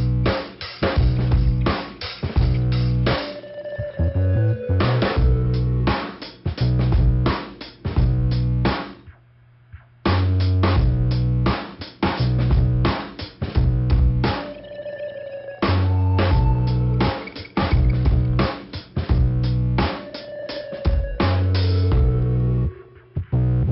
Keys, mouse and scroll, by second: 0.7-1.6 scroll down 2, 2.2 scroll up 1, 2.7 click, 3.5 click, 4.5 click, 5.0 scroll up 2, 5.5 click, 7.1 click, 7.5 scroll down 2, 9.3 middle click, 10.9 click, 11.6 click, 12.7 click, 13.3 click, 13.8 scroll up 2, 16.8 click, 17.5 scroll down 2, 19.0 click, 19.6 click, 20.7 click, 20.8 click, 21.8 click, 22.5 click.